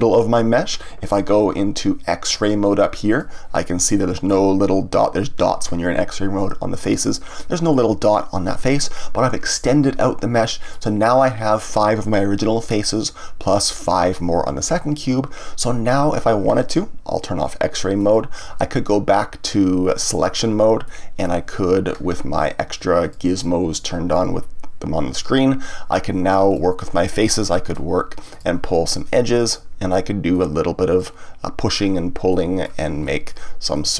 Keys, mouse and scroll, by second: 3.0 click, 3.9-6.9 middle drag, 7.7-13.4 middle drag, 18.0 click, 20.0 click, 20.8-23.0 middle drag, 23.0-26.0 drag, 26.4 click, 28.3 click, 29.0 click, 30.3-32.3 drag, 32.3-33.7 middle drag, 33.7 click.